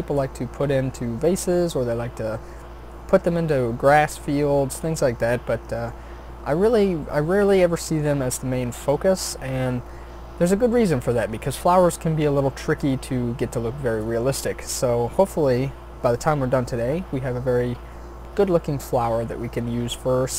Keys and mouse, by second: 16.2-17.6 middle drag, 18.2-19.9 middle drag.